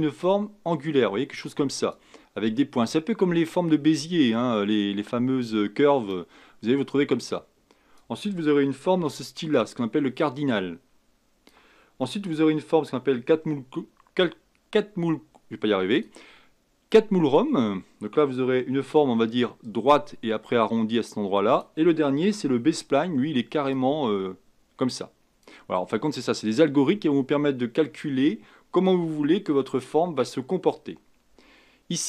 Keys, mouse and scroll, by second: 15.9-19.1 drag, 19.6-22.7 drag, 23.7-26.8 drag.